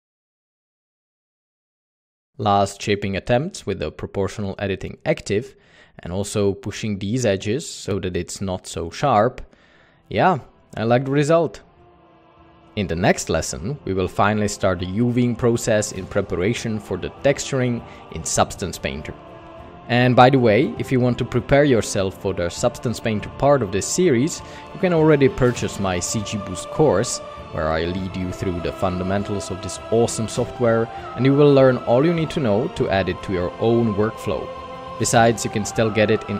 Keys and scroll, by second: 0.0-2.7 typing, 1.9 alt+a, 3.9 Tab, 4.1 alt+a, 6.3 Tab, 7.7 Tab, 8.8 typing, 11.0-12.3 typing, 11.8 Tab, 13.6 alt+a, 15.8 Tab, 20.6 Tab, 21.2 Tab, 22.9 alt+a.